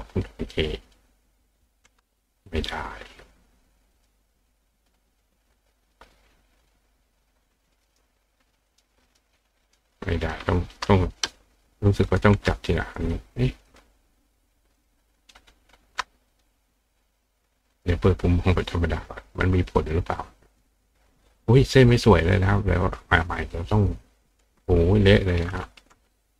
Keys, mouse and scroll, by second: 3.9 click, 7.9 click, 8.7 click, 9.1 click, 9.7 click, 9.9 click, 13.1 click, 13.7 click, 14.8 click, 16.3 click, 17.7 click, 19.8 click, 20.5 click, 22.2 click, 23.1 click, 24.2 click.